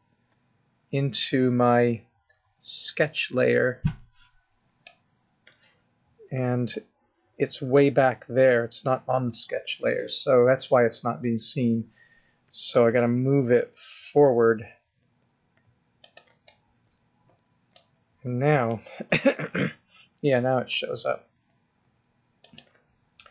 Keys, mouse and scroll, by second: 0.8-1.5 scroll up 5, 6.0 scroll up 3, 6.7 middle click, 8.6-9.1 scroll down 2, 9.3 middle click, 12.5 g, 16.5 middle click, 18.0-18.9 scroll up 1, 18.9 KP_0, 19.6 scroll up 3, 20.7 g, 22.9-23.3 scroll up 4.